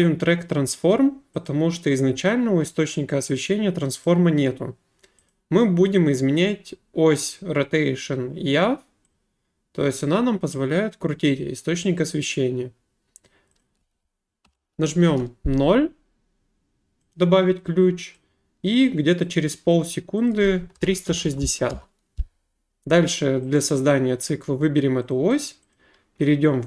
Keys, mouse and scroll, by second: 1.4 click, 4.0 click, 5.3 click, 13.2 click, 13.6 click, 14.4 0, 15.1 Return, 17.1 click, 19.5 click, 20.3 click, 20.5-21.7 typing, 23.5 click, 25.1 click, 25.4 click, 25.7 click.